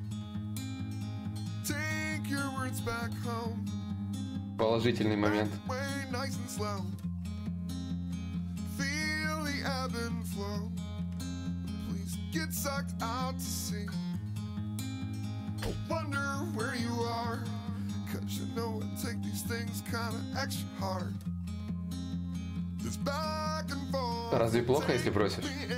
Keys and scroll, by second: 15.2 b, 15.8 d, 16.1 i, 22.8 ctrl+z.